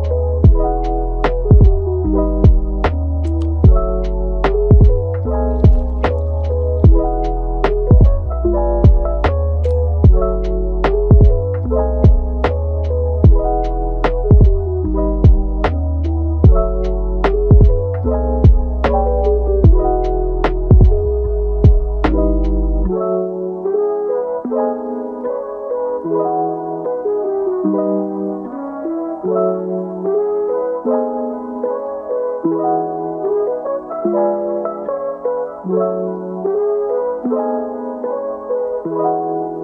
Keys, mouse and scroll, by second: 2.1-2.4 scroll up 1, 2.4 middle click, 2.7 g, 4.0-4.6 shift+middle drag, 4.6-4.9 scroll up 1, 4.9-5.2 shift+middle drag, 5.2 g, 6.4-7.0 shift+middle drag, 7.0 Tab, 7.4 middle click, 8.0 click, 9.0 shift+click, 11.7 Delete, 13.1 click, 14.0 middle click, 14.7 scroll up 1, 15.0-16.1 middle drag, 16.1-20.9 right drag, 20.9 KP_7, 21.8 scroll down 2, 22.1 shift+middle click, 22.6 scroll up 1, 22.8-23.9 shift+middle drag, 23.9 click, 25.7 g, 30.1 g, 32.4 click, 32.7 g, 34.7 g, 38.0-38.7 scroll down 1, 38.7 click, 39.2-39.6 right drag.